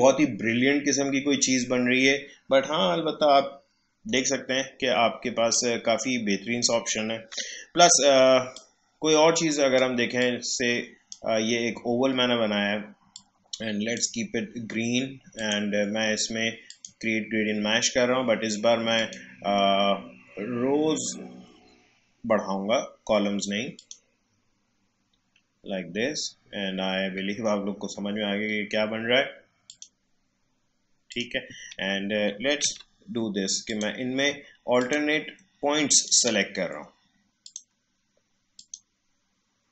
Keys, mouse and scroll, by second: 5.5-7.3 drag, 7.3 Delete, 8.5-13.1 drag, 13.1-15.3 drag, 19.5-23.7 scroll down 1, 23.7 click, 24.2-25.1 scroll up 1, 29.7 click, 30.2-31.1 scroll up 1, 31.1 click, 32.6 a, 33.7 click, 34.7-39.7 shift+drag.